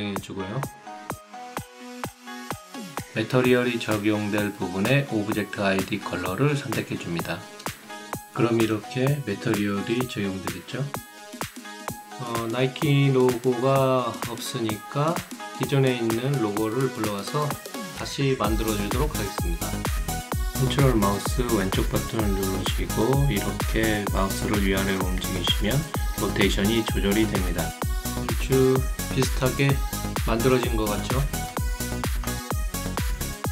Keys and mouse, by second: 1.2 right click, 2.4 click, 4.2 click, 11.4 click, 14.2 click, 17.3 click, 19.2 click, 21.8 right click, 22.9 alt+right click, 24.2-25.3 ctrl+right drag, 25.5-26.8 ctrl+drag, 27.6 click, 32.5 click.